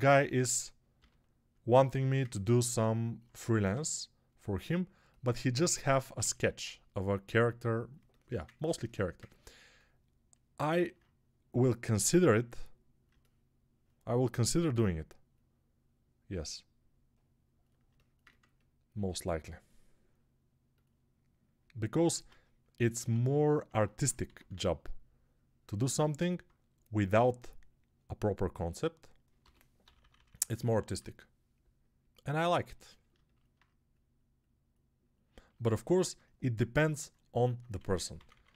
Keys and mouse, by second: 0.8 g, 3.6 g, 13.0-38.5 alt+drag, 13.1 alt+middle click, 13.6 alt+middle click, 22.0 ctrl+Tab, 23.0 alt+q, 24.1 x, 29.3-30.8 typing, 37.6 3, 38.0 [, 38.2 [, 38.3 [.